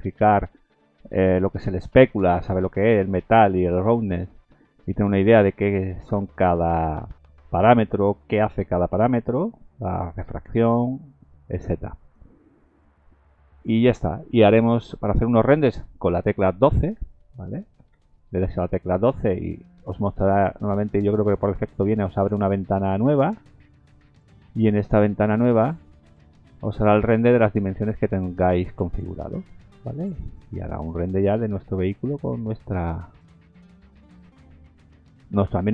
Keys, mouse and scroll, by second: 12.8-15.9 scroll down 2, 17.9 F12, 27.3 F12.